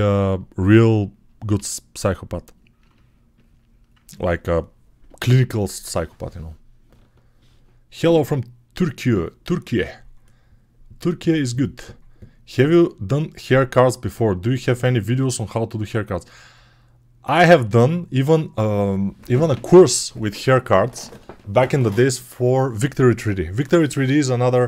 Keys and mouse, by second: 1.4 g, 2.8-24.6 middle drag.